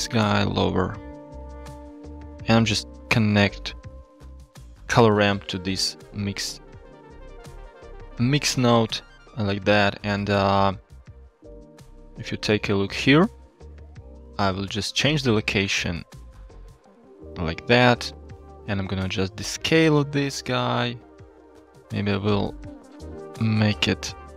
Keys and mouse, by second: 0.6 shift+middle click, 1.1 click, 1.3 g, 4.3 middle click, 6.9 shift+middle click, 8.0 click, 8.8 g, 9.6 shift+middle click, 11.8-12.1 shift+middle drag, 14.5 shift+middle click, 15.3-16.3 shift+drag, 16.7-18.4 shift+drag, 19.0 shift+click, 20.1-22.0 shift+drag, 22.5-24.3 shift+drag.